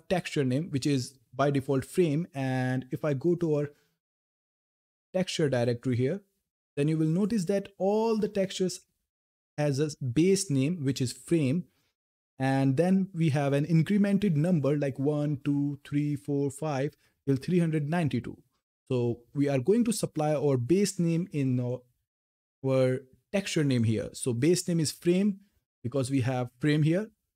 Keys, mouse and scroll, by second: 2.8 click, 3.8 scroll up 1, 6.9 click, 7.9 scroll down 1, 9.6 scroll up 1, 16.5 scroll down 1, 18.1 scroll up 1, 21.4 click, 25.9 click.